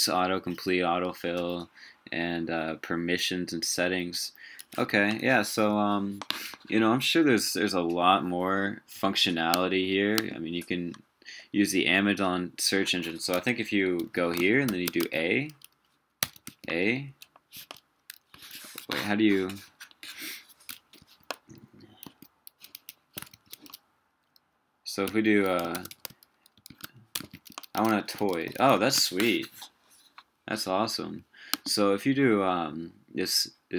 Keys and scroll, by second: 4.9 super+w, 14.0 super+t, 18.4 super+w, 23.3 super+t.